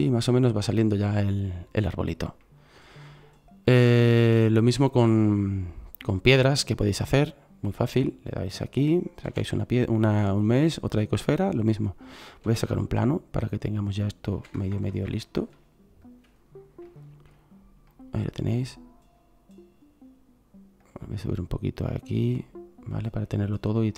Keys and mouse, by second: 9.2 shift+a, 12.4 shift+a, 14.3 s, 20.8-21.3 right drag, 21.3-23.7 drag, 22.4-23.7 middle drag, 22.4-23.9 right drag.